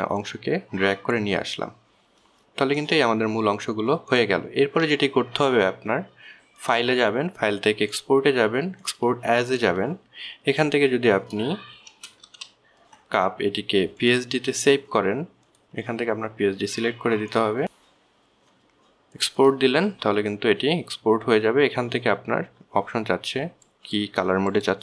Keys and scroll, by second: 13.3 shift+c, 13.5 shift+u, 13.6 shift+p.